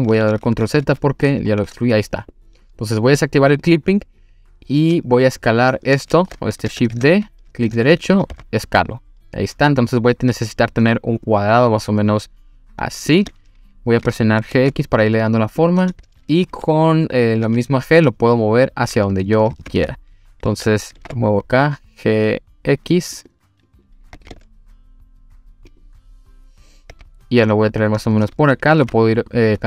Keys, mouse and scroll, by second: 0.1 ctrl+z, 0.2 ctrl+z, 0.4 ctrl+z, 0.5 ctrl+z, 0.8 ctrl+z, 1.5-2.1 scroll up 2, 3.6 click, 4.8 s, 5.7 click, 6.0 ctrl+z, 6.9 shift+d, 7.7 right click, 8.3 s, 13.1 click, 14.5 g, 14.6 x, 15.6 click, 17.4 g, 19.1 click, 19.5 ctrl+z, 20.9 g, 21.0 x, 23.2 click, 23.7 click, 24.2 g, 24.3 x, 25.7 click, 26.9 g, 28.3 click, 28.8 g.